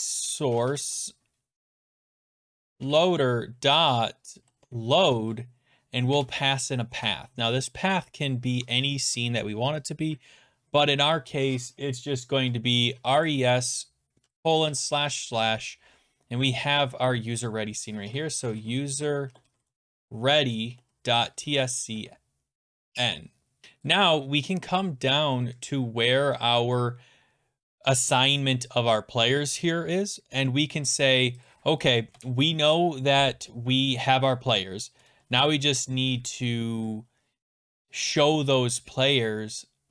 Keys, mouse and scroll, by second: 0.0-2.7 typing, 2.7 Tab, 3.8-6.6 typing, 12.7-14.7 typing, 16.2 click, 17.8-22.4 typing, 23.6 scroll, 23.9 click, 24.2-26.6 scroll, 26.6 scroll, 31.5 click, 32.1 Return.